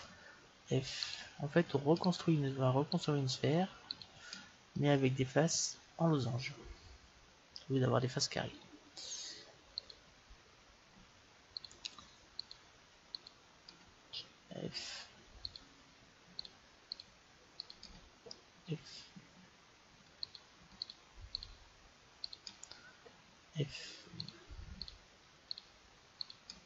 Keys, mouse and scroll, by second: 0.1 f, 1.1-4.8 right drag, 4.8 middle click, 5.7 right click, 5.9 middle click, 8.5 f, 9.8-14.9 right drag, 14.4 f, 15.5-19.4 right drag, 18.5 f, 20.3-23.8 right drag, 23.2 f, 24.3-26.6 right drag.